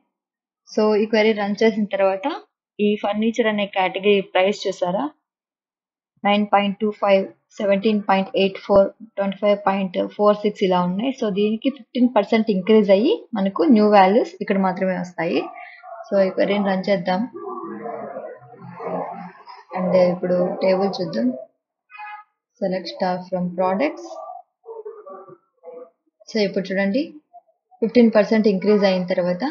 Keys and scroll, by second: 0.0-0.1 typing.